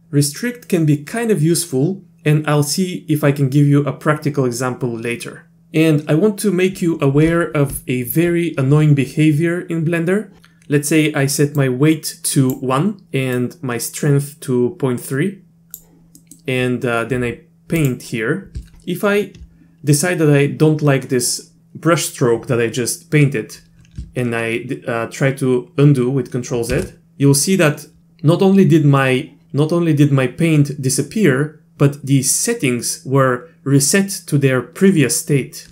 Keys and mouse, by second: 11.7 click, 13.4-15.8 drag, 16.2 middle click, 17.8 click, 26.7 ctrl+z.